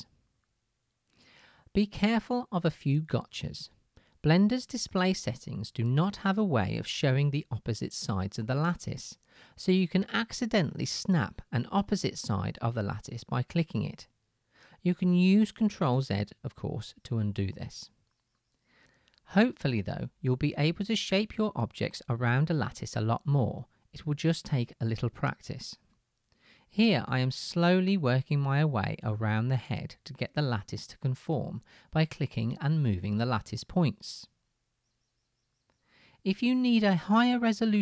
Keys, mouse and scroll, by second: 16.7 ctrl+z.